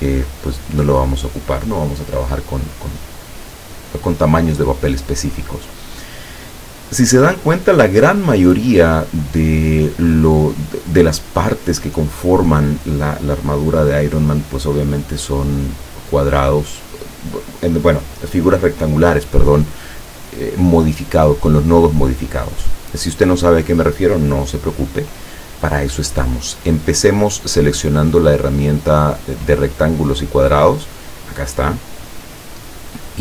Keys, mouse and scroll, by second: 0.8 click, 23.1 click.